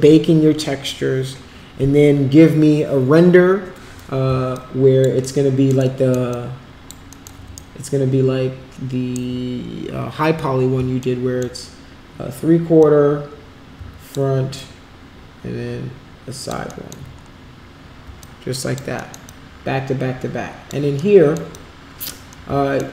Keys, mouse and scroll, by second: 4.5 alt+click, 5.4 alt+middle click, 5.9 alt+middle click, 6.3 alt+click, 7.1 alt+middle click, 7.6-9.3 shift+right drag, 11.1 alt+middle click, 12.8-14.1 alt+drag, 14.6-16.5 alt+drag, 16.7 alt+middle click, 18.2 alt+click, 19.3-20.7 alt+drag, 21.0 alt+middle click, 21.5 alt+click, 22.4 alt+middle click.